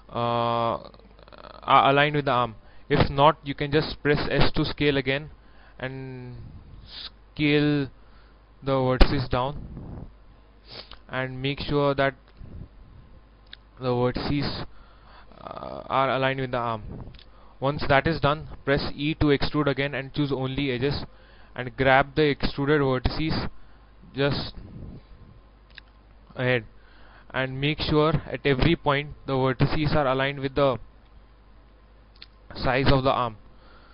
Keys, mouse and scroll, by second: 4.3 s, 7.9 click, 8.4 shift+middle click, 9.3-11.0 drag, 11.0-11.9 scroll up 1, 11.9-13.1 scroll up 1, 13.1 click, 13.6 shift+middle click, 16.0 scroll down 1, 16.7 shift+middle click, 18.7 e, 20.3 click, 27.0 s, 28.8 click, 31.0 s, 31.7 click, 32.0 shift+middle click, 33.1 shift+e, 33.5 click.